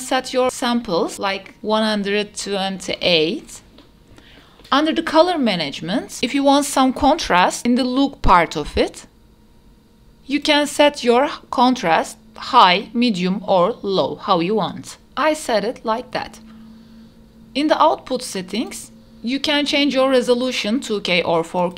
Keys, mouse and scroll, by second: 4.3 scroll down 1, 4.4 click, 4.9-6.2 scroll down 2, 6.2-8.1 drag, 6.2-7.0 scroll down 1, 9.2-10.7 drag, 12.5-15.6 drag, 16.7 space, 17.1 click, 18.3-20.2 scroll up 3, 21.5-21.7 drag.